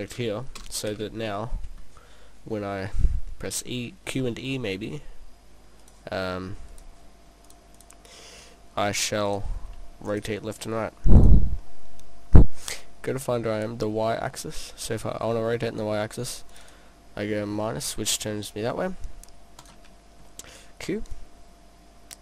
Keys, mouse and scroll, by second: 0.0 right click, 0.6 KP_0, 4.6 middle click, 5.9 click, 6.6 click, 6.7 click, 7.5 click, 7.8 click, 10.2 click, 11.7 middle click, 12.6 middle click, 14.9-16.6 scroll up 5, 15.6 middle click, 16.6 click, 16.7 click, 17.6 middle click, 18.9 middle click, 19.6 click, 20.3 middle click, 21.2 click.